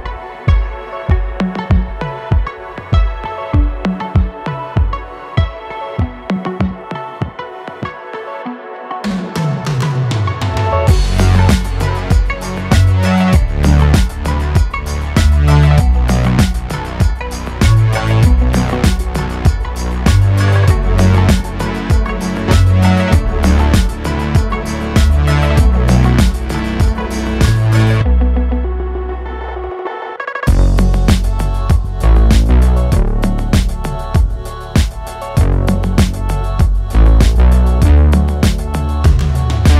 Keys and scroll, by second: 6.1 e, 8.7 e, 9.7 s, 13.6 e, 15.1 s, 17.3 e, 19.6 s, 23.5 e, 28.2 e, 28.9 Escape, 30.0 s, 33.5 e, 38.6 i.